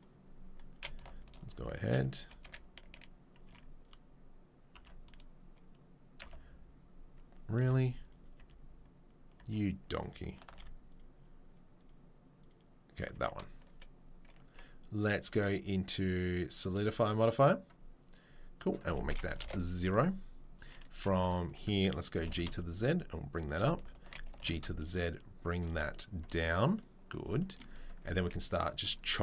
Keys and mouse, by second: 1.0 alt+middle click, 1.1 click, 1.2 middle click, 1.8-3.8 alt+middle drag, 3.6 Tab, 3.8 click, 3.9-11.8 middle drag, 4.7 Tab, 7.6 Tab, 7.6 h, 8.4 Tab, 9.4 Tab, 10.5 alt+h, 11.8 right click, 11.9 middle click, 12.4 right click, 12.5-15.2 middle drag, 13.1 Tab, 17.5-21.2 right drag, 21.2-29.2 alt+middle drag, 22.1 g, 24.3 g, 28.2 ctrl+r.